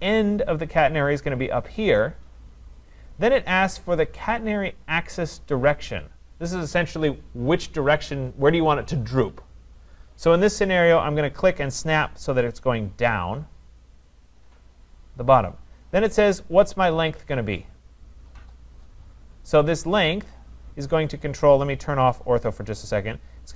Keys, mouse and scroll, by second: 2.0 click, 14.4 click, 22.5-23.5 drag.